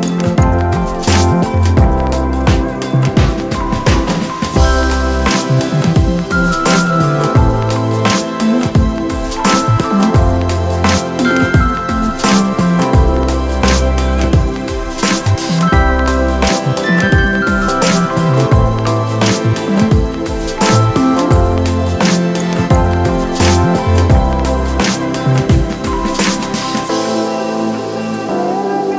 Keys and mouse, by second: 1.6-3.7 drag, 3.7 ctrl+t, 4.8 ctrl+t, 5.1 ctrl+0, 5.9 ctrl+0, 6.5 ctrl+0, 7.1-11.5 alt+shift+drag, 13.0-14.3 shift+drag, 14.3 shift+=, 15.4-28.9 shift+drag.